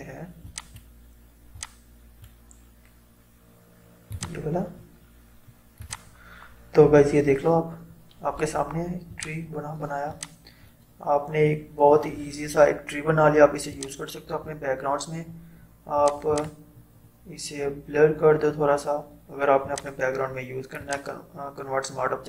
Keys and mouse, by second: 9.1-13.1 drag, 13.7-16.0 drag, 19.7 click.